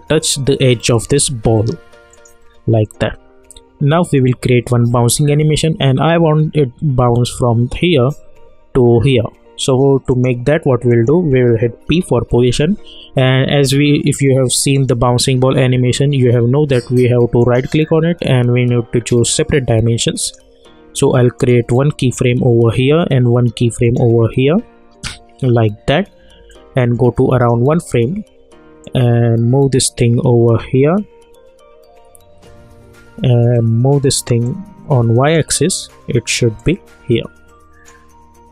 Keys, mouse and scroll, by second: 0.0 alt+scroll down 1, 2.1 click, 10.1 click, 11.8 p, 14.7 click, 17.4 right click, 19.2 click, 23.8 click, 25.4 =, 26.5-38.5 drag, 38.4 @.